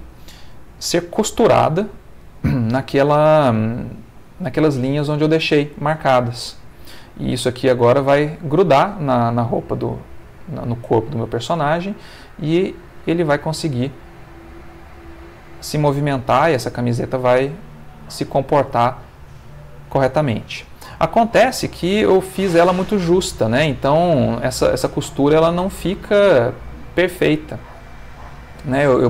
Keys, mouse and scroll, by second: 0.2 middle click, 1.0-2.4 middle drag, 5.5-7.1 middle drag, 24.2 Escape, 25.1-26.4 middle drag, 27.2-29.0 middle drag.